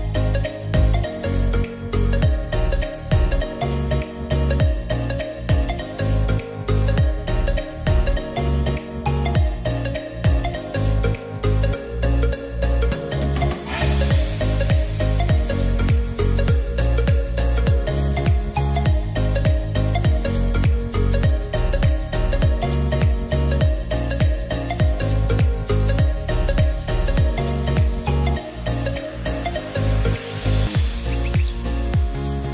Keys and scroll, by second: 14.1 r, 16.9 Return, 17.8 0, 18.1 Return, 20.2 e, 26.4 1, 26.6 Tab, 26.7 1, 26.8 Return.